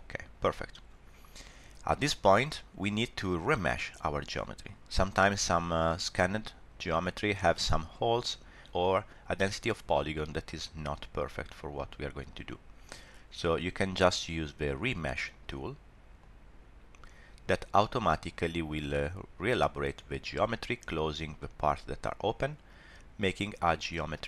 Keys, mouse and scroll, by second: 1.7 scroll up 1, 5.9 middle click, 8.2 scroll down 1, 8.3 middle click, 16.2 click, 21.4 middle click.